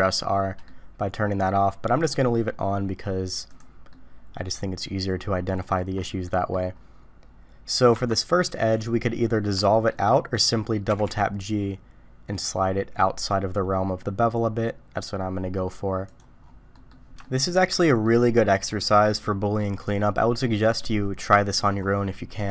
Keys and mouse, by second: 3.5 click, 3.9-5.7 middle drag, 6.3 middle click, 7.9 Tab, 8.8 middle click, 9.6 shift+click, 10.9 g, 16.7 middle click, 17.2 shift+middle drag, 17.7 middle click, 18.4 middle click, 19.2 middle click, 20.8-21.5 middle drag.